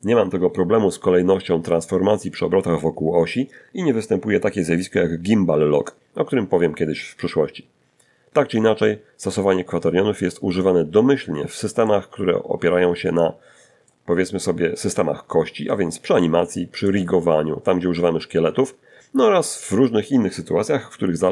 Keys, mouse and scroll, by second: 10.0-12.3 middle drag, 12.5-13.4 scroll down 3, 13.4-14.5 scroll up 3, 14.7 shift+middle click, 16.9-17.4 scroll down 4.